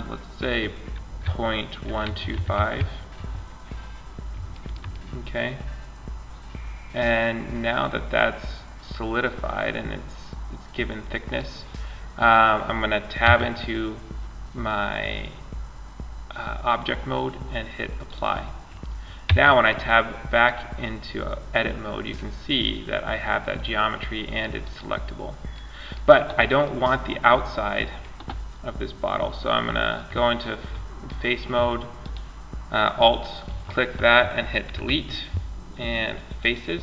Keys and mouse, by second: 3.4 middle click, 6.1 middle click, 9.8 middle click, 10.0 middle click, 12.5 Tab, 18.5 Tab, 21.1 middle click, 23.8 right click, 24.4-25.8 drag, 29.6-31.2 drag, 31.2-32.8 drag, 34.0 Delete.